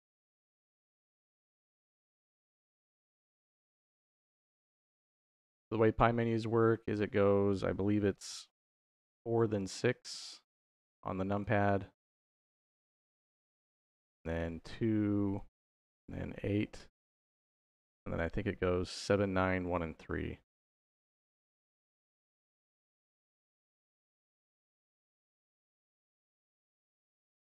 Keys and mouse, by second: 0.5 click, 1.5 shift+d, 2.9 click, 3.5 middle click, 4.5 click, 5.2 middle click, 6.1-8.2 drag, 10.6 click, 12.3 click, 14.2-15.3 drag, 15.9-16.9 drag, 20.2 click, 23.3-27.4 drag, 26.3 s.